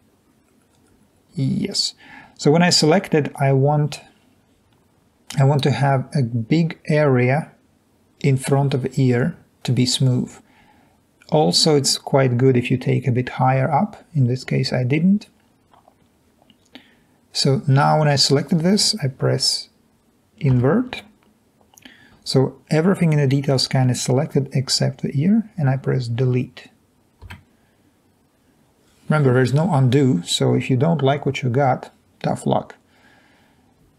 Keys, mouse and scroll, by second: 20.7 i, 27.4 Delete.